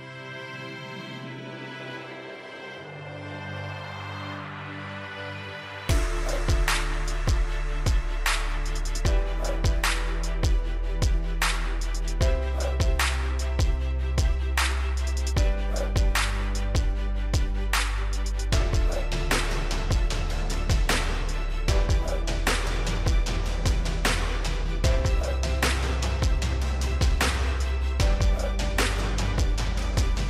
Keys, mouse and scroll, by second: 2.0 scroll down 1, 2.2 click, 11.9 right click, 13.0 click, 17.5 8, 18.0 Return, 19.0 click.